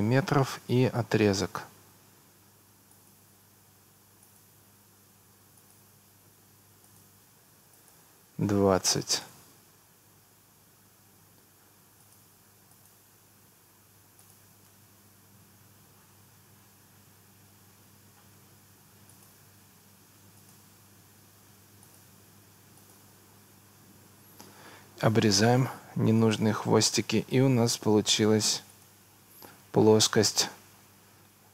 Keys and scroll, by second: 4.7 Escape, 8.5 2, 9.0 0, 9.3 Return, 10.4 Escape, 19.7 Escape.